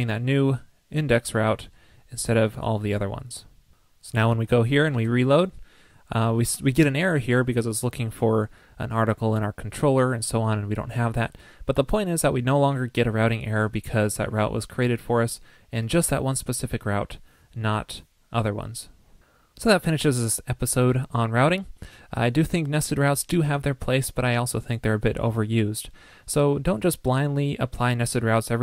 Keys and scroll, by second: 4.9 super+r.